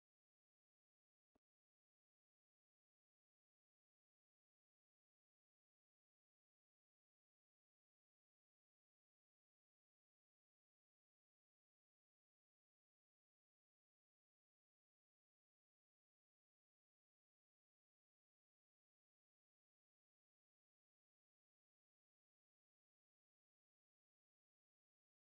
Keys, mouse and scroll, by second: 0.0 scroll down 1, 0.3 alt+click, 2.3 alt+middle click, 3.4 alt+click, 5.5 right click, 7.2 scroll up 1, 7.5 alt+click, 8.8 alt+middle click, 9.2 alt+click, 10.5 scroll down 1, 11.4 alt+click, 12.5-13.0 scroll up 1, 13.9 alt+click, 15.7 alt+click, 16.9 ctrl+z, 20.6 alt+click, 24.3 alt+click.